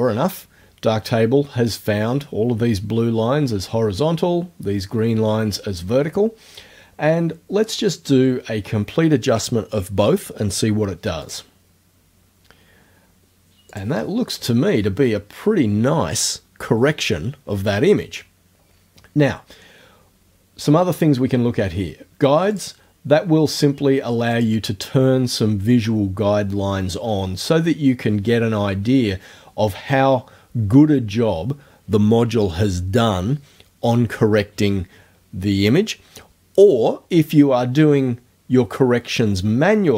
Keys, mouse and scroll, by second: 11.3 click, 13.8 click, 22.5 click, 24.4 click.